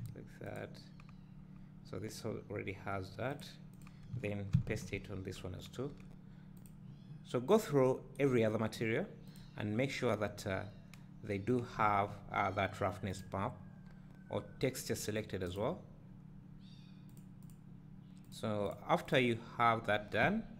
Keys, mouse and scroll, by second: 0.5 click, 3.3 click, 4.6 ctrl+v, 5.9-6.7 scroll up 2, 6.7 click, 9.4 click, 13.8-14.4 scroll up 2, 13.9 click, 13.9 right click, 14.4-15.1 scroll down 2, 15.6 click, 18.3 click, 19.5 scroll down 1.